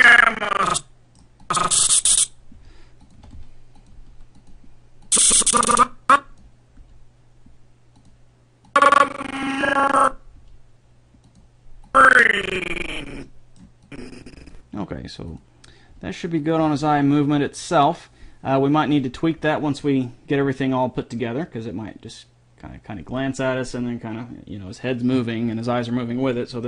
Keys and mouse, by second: 1.1-2.8 drag, 2.8 g, 3.4 r, 4.1 g, 5.3-6.8 drag, 7.0 g, 10.6 g, 13.4 click, 14.0-15.2 drag, 16.1 g, 16.2-17.5 drag.